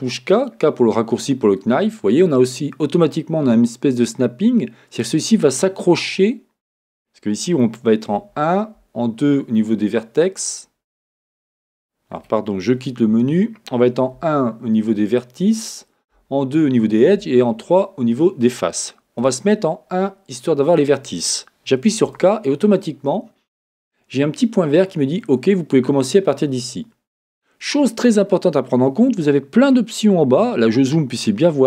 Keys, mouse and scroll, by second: 13.2 Escape, 16.1 2, 17.2 3, 19.2 1, 22.0 k.